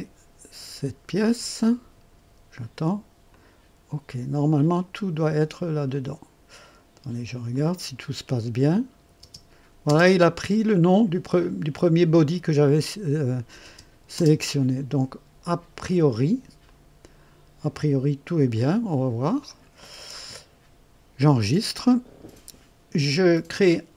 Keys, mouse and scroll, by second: 1.2 click, 3.2 click, 5.8 click, 7.4 click, 8.6 click, 9.1 space, 9.8 space, 13.6 space, 14.1 space, 16.6 click, 18.5 click, 19.4 click, 21.3 ctrl+s.